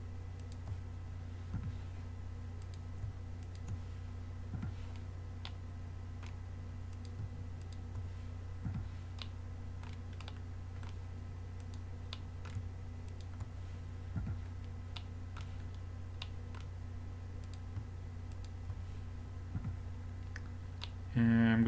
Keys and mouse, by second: 1.6 f, 4.6 f, 7.0-7.7 drag, 8.7 f, 8.9 click, 9.0 click, 11.6-12.2 drag, 12.2-13.9 middle drag, 14.2 f, 17.5 right click, 17.5-20.0 drag, 19.6 f, 20.1-20.8 middle drag.